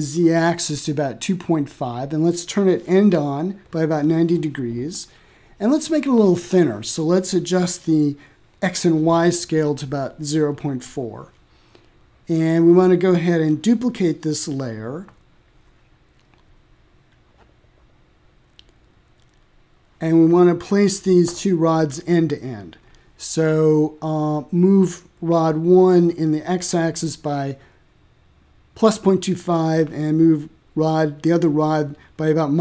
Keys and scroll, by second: 0.2 Return, 2.6 m, 5.1 0, 5.4 ., 5.9 4, 6.3 Return, 8.8 0, 9.7 4, 11.3 BackSpace, 11.9 ., 12.5 4, 13.0 Return, 27.3-28.9 typing, 29.9 Return, 31.5 ctrl+g.